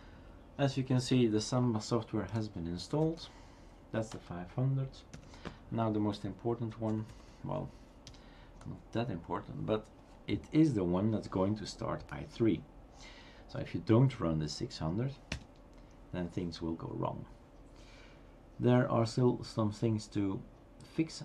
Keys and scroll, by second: 3.0 Up, 5.1 Down, 6.9 typing, 8.6 Tab, 8.6 typing, 15.3 Return.